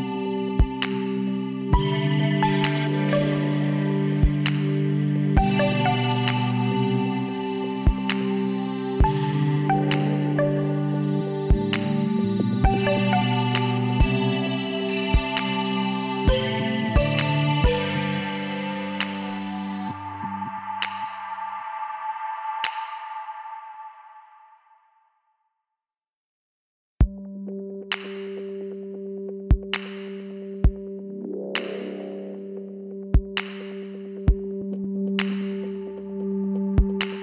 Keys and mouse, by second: 3.1-6.3 middle drag, 5.7 z, 6.3-8.2 drag, 6.7 b, 8.3 middle click, 9.5 b, 9.7 click, 11.5 middle click, 11.7-13.1 middle drag, 12.9 s, 16.6-18.2 drag, 18.6 click, 19.4-20.4 middle drag, 20.5 middle click, 20.8-23.9 drag, 23.1-25.5 middle drag, 25.5-27.2 drag, 27.3 s, 27.4-29.0 middle drag, 29.7 x, 30.9 z, 31.2 middle click, 32.8-35.3 drag, 35.3-36.5 middle drag, 36.9 e.